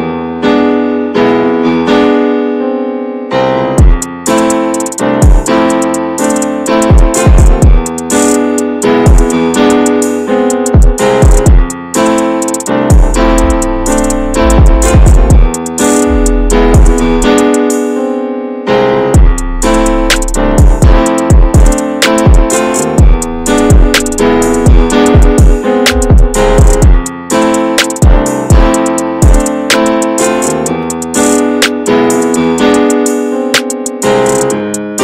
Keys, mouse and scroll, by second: 0.4-0.8 scroll down 1, 0.8-2.0 shift+middle drag, 2.0-2.5 scroll up 7, 2.5 shift+middle click, 2.9-3.5 scroll up 3, 3.5 shift+middle click, 3.7-4.9 scroll up 1, 4.9 click, 5.3 alt+shift+click, 5.7 alt+shift+click, 6.0 ctrl+b, 8.0 scroll down 1, 8.2 middle click, 9.0 scroll up 1, 9.3 middle click, 9.8 Tab, 10.1 middle click, 10.3 scroll up 1, 10.6-11.4 scroll down 9, 11.4 middle click, 11.7 Tab, 12.0 scroll down 1, 12.2 scroll up 1, 12.4-12.9 scroll down 11, 13.3-14.5 shift+middle drag, 14.5-15.0 shift+scroll up 1, 15.0 click, 15.8 alt+shift+click, 16.1 scroll down 2, 16.4-17.4 middle drag, 17.4 ctrl+b, 18.9 Tab, 19.0 click, 19.3 scroll down 2, 19.9-21.7 shift+middle drag, 21.7-22.2 shift+scroll up 4, 22.2-22.8 shift+middle drag, 22.8 click, 23.2 Tab, 23.4 scroll down 2, 24.3 Tab, 24.4 click, 24.7 ctrl+a, 24.9 Tab, 25.5 right click, 26.0-26.4 scroll down 4, 26.4 shift+middle click, 27.3 click, 27.7 shift+middle click, 28.1 click, 28.3 scroll down 2, 28.5 middle click, 29.3-30.0 shift+scroll up 8, 30.0 middle click, 30.7 Tab, 31.1 click, 31.5 /, 32.4-33.6 drag, 33.6 /, 34.1 middle click, 34.4 Tab.